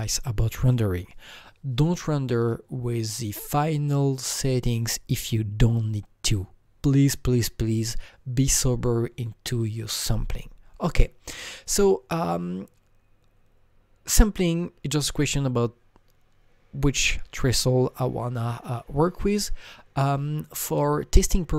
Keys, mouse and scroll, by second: 21.5 scroll down 1.